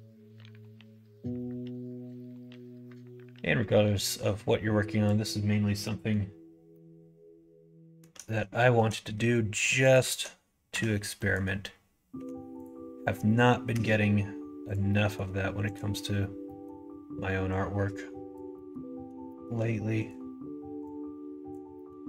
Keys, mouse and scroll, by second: 0.2 middle click, 1.2 middle click, 2.3 click, 3.9-5.8 drag, 5.8 middle click, 6.7 scroll up 1, 6.7-7.9 middle drag, 8.5 scroll up 1, 8.6 shift+middle click, 9.8 shift+click, 10.7 f, 11.2 middle click, 12.1 1, 12.5 click, 13.7 g, 14.8 middle click, 15.6 click, 16.4 middle click, 17.5 click, 18.5 middle click, 19.2 shift+middle click, 20.9 click, 21.7 middle click.